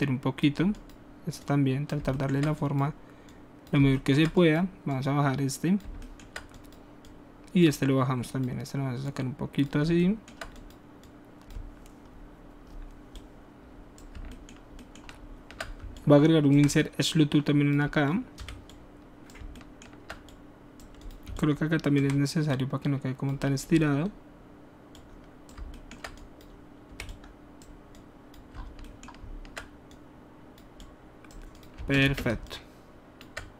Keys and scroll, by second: 18.3 w, 26.9 w, 31.7 space.